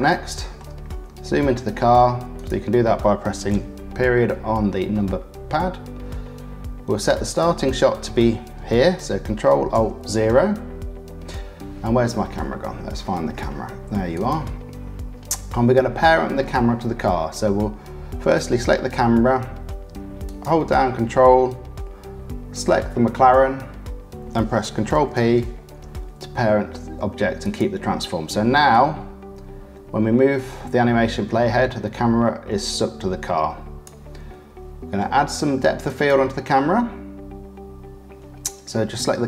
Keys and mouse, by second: 0.1 shift+middle click, 1.7 middle click, 2.3 click, 3.5 KP_Decimal, 4.9-7.3 drag, 9.7 ctrl+alt+KP_0, 20.2 ctrl+click, 24.9 ctrl+p, 28.9 click, 33.4 click, 33.8-35.9 middle drag, 35.9 click, 36.1-39.2 middle drag.